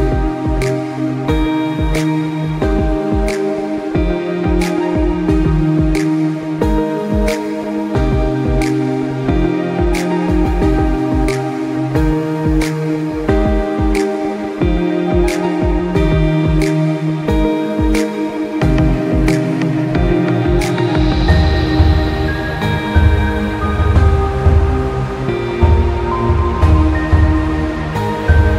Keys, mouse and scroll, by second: 21.2 s, 21.4 click, 21.6 space, 21.8 scroll down 1, 22.0 space, 22.2 click, 22.4 space, 22.5 click, 24.0 click, 24.2-24.5 alt+scroll up 2, 24.5 click, 24.9 click, 25.0 space, 25.6 click, 26.4 space, 26.6 ctrl+z, 27.3 space, 27.5 click, 28.0 space, 28.2 click.